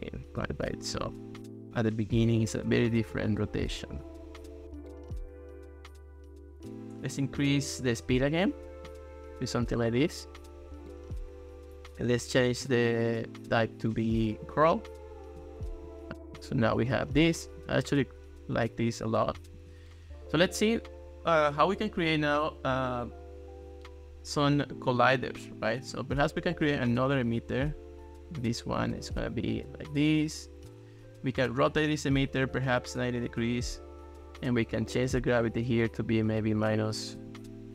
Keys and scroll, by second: 36.7 -, 37.2 4.